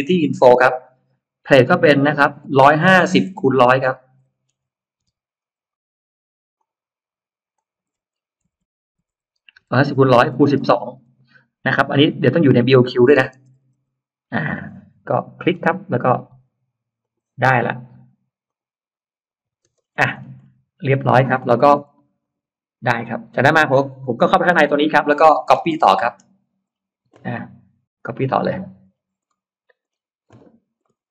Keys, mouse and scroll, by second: 1.7 click, 3.1-5.4 typing, 6.4 click, 7.4 click, 8.3-10.9 typing, 12.3 click, 13.3 BackSpace, 13.6 BackSpace, 14.3 BackSpace, 15.0 click, 15.3 middle click, 15.7 middle click, 16.9 click, 18.3 click, 19.6-20.3 scroll down 2, 19.6 space, 20.0 Escape, 20.7-21.9 scroll up 4, 22.1 click, 23.0 click, 23.9-24.5 scroll down 2, 24.5 n, 24.9 click, 25.3 scroll down 2, 25.9 middle click, 26.1-26.8 scroll down 4, 27.2 middle click, 27.4-29.0 scroll down 5, 29.1 middle click, 30.7 middle click, 30.9-31.1 scroll down 1.